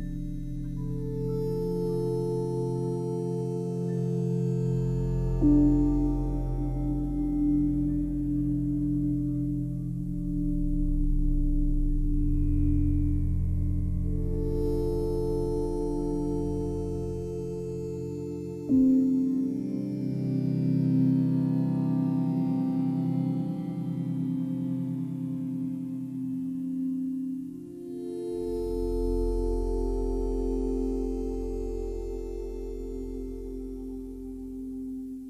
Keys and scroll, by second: 24.4 space, 31.2 space.